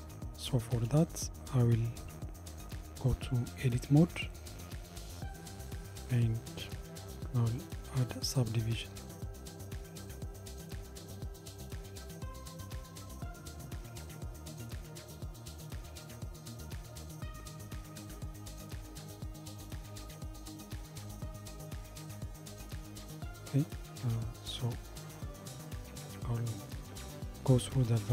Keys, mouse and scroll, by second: 1.0 KP_7, 2.2 Tab, 3.1 scroll down 2, 6.5 ctrl+r, 25.8 click, 27.8 g.